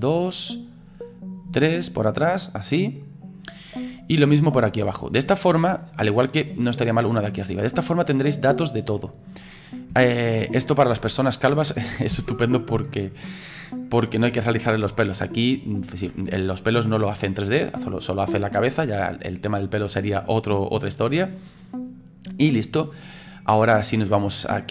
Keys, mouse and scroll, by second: 9.0-12.1 middle drag, 12.1 KP_1, 13.3-21.7 middle drag, 21.7-22.1 scroll down 2, 22.1-24.5 scroll up 4, 24.5 click.